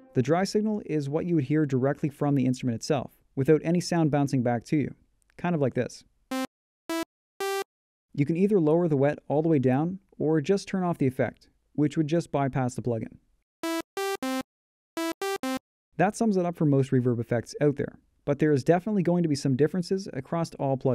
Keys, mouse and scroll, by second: 10.5 F1, 11.4 F9.